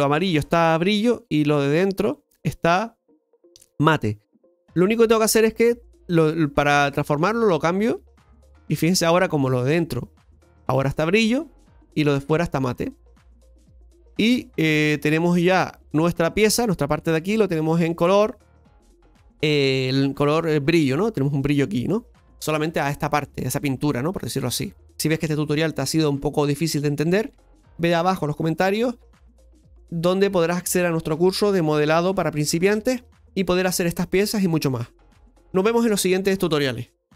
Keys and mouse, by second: 5.6-6.6 drag, 7.5-9.1 drag, 9.7-11.8 middle drag, 14.1-24.9 middle drag.